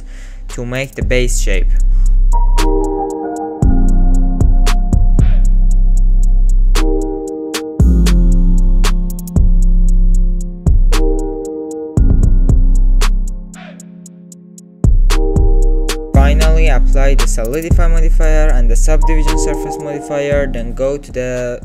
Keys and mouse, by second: 0.6 alt+click, 1.2 shift+g, 1.9 e, 2.5 alt+click, 2.6 alt+z, 2.8 alt+click, 3.2 alt+z, 3.2 s, 4.2 g, 5.1 alt+click, 5.6 s, 5.7 alt+z, 5.8 alt+click, 6.5 e, 7.1 alt+z, 7.2 s, 8.0 click, 8.4 s, 8.7 g, 9.3 alt+z, 9.5 alt+click, 10.0 r, 10.6 g, 11.1 middle click, 11.5 Tab, 11.6 middle click, 12.1 middle click, 12.6 middle click, 13.3 Tab, 13.4 middle click, 13.5 s, 14.2-15.5 middle drag, 14.4 Tab, 17.8-18.3 drag, 18.7-19.4 drag, 20.1 click.